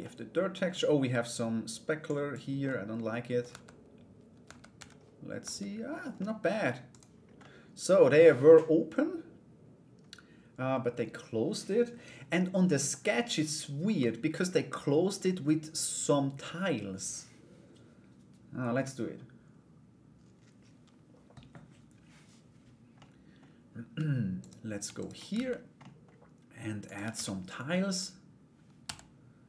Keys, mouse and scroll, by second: 1.7 click, 2.2 middle click, 3.1 Tab, 4.3 a, 5.0 Tab, 5.7 middle click, 6.5 right click, 7.0 middle click, 22.5 middle click, 24.0 right click, 24.6 shift+right click, 25.4 middle click, 26.4 click, 26.7 shift+a, 28.4 s.